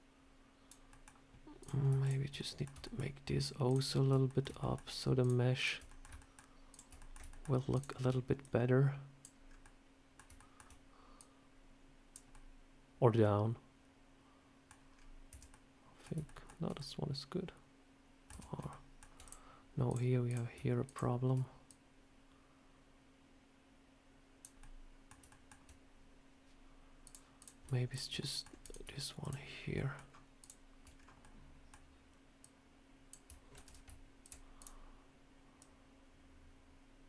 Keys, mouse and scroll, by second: 0.8 middle click, 1.5 click, 1.9 shift+click, 2.2 middle click, 2.7 shift+middle click, 3.3 shift+click, 4.2 shift+click, 4.2 middle click, 4.5 shift+middle click, 5.1 shift+click, 5.8 middle click, 6.1 shift+middle click, 6.6 shift+click, 6.9 middle click, 7.2 shift+middle click, 7.6 shift+click, 8.3 click, 9.3 scroll up 2, 9.5 middle click, 10.3 middle click, 11.1 click, 12.2 middle click, 14.8 scroll down 3, 15.2 Tab, 15.4 middle click, 16.1 shift+middle click, 16.7 middle click, 18.2 Tab, 18.4 scroll up 2, 18.6 shift+middle click, 19.1 click, 19.8 click, 20.2 click, 20.7 shift+click, 20.8 shift+click, 21.6 click, 24.5 middle click, 25.2 shift+middle click, 26.9 click, 27.3 click, 27.8 shift+click, 27.9 shift+click, 28.1 middle click, 28.5 click, 29.1 shift+click, 29.6 shift+middle click, 30.3 shift+click, 30.8 scroll down 2, 31.1 middle click, 32.3 click, 33.5 ctrl+z, 34.1 shift+click, 34.5 click, 35.5 click, 35.6 shift+click.